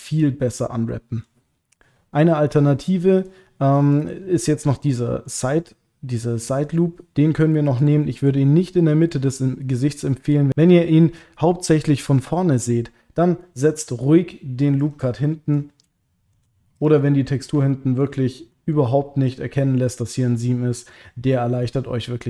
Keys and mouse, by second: 2.4-4.0 middle drag, 4.6 click, 4.9 middle click, 7.5 middle click, 8.0 ctrl+middle click, 9.1-10.3 middle drag, 13.5 middle click, 14.8 ctrl+click, 15.2 middle click, 16.0 shift+middle click, 16.7 click, 17.1 middle click, 17.7 ctrl+middle click, 18.3 middle click, 20.0 middle click, 21.3 middle click.